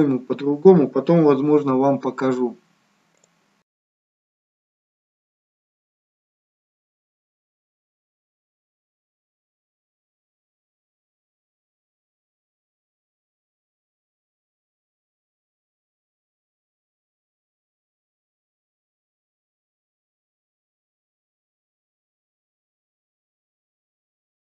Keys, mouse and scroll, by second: 3.1 click, 3.6-4.1 scroll up 4, 4.7 click, 6.1 click, 9.7 click.